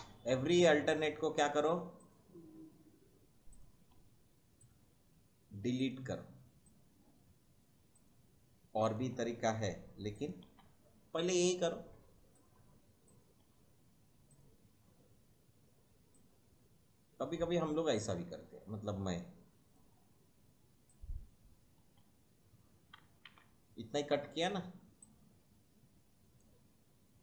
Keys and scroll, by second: 0.0 Delete, 1.5 Delete, 3.9 Delete, 6.1 Delete, 10.5 Delete, 11.8 Delete, 19.9 Delete, 21.8 Delete, 23.2 ctrl+z.